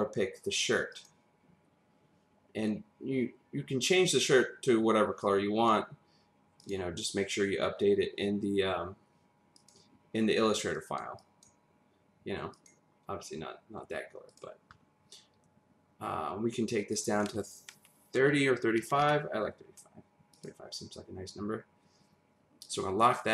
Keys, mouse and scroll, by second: 0.9 click, 5.2 click, 6.6 click, 9.6 click, 11.2 click, 12.5 click, 14.3 click, 16.9 click, 18.2-18.8 typing, 19.0 Return, 22.6 click.